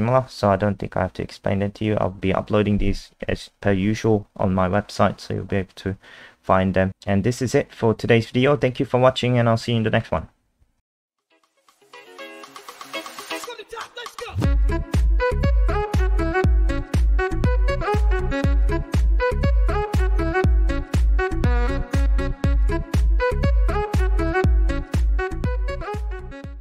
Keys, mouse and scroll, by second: 0.2 scroll up 3.